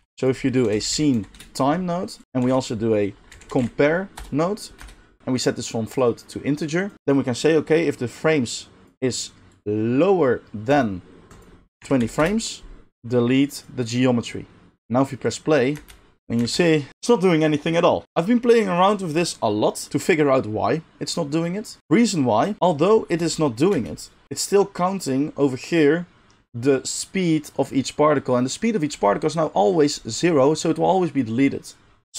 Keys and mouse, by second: 2.2 shift+a, 2.4 shift+a, 5.8-18.0 drag, 15.7 space, 16.4 space, 18.0-21.8 middle drag, 18.0 g, 21.8 click, 21.8 g, 22.0 middle click, 22.0-32.1 drag, 23.2 space, 23.7 space.